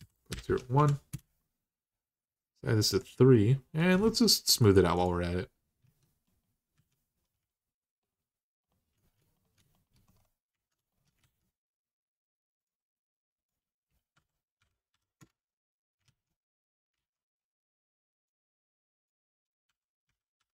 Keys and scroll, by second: 0.0-0.5 typing, 0.9 Return, 3.8 Tab, 5.4-7.0 typing, 11.0 alt+z, 13.9-14.7 typing, 15.0 Return, 15.8 alt+z, 16.7 alt+z, 19.4-20.2 typing, 20.4 Return.